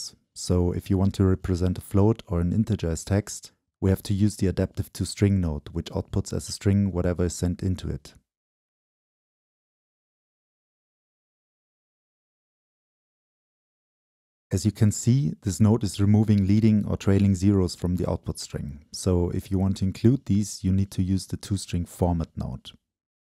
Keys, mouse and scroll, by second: 0.0-1.1 right drag, 1.1-4.0 middle drag, 4.0 Return, 5.2-6.1 drag, 7.3-8.8 drag, 9.3-10.1 right drag, 10.1-12.1 drag, 12.1 Return, 13.3-15.0 drag, 13.3-14.3 scroll up 2, 16.1-17.7 drag, 18.9-19.9 middle drag, 18.9 scroll down 1, 19.1 scroll up 1, 19.7-20.0 scroll up 2, 19.9 click, 19.9 middle click, 20.1 click.